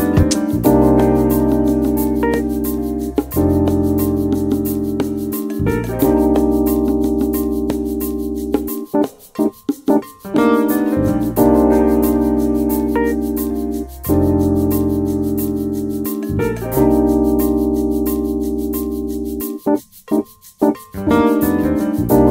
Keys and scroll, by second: 1.8 typing, 2.1 Return, 3.1-5.9 typing, 7.8-11.5 typing, 12.6-13.5 typing, 18.9-19.9 typing, 21.7-22.3 typing.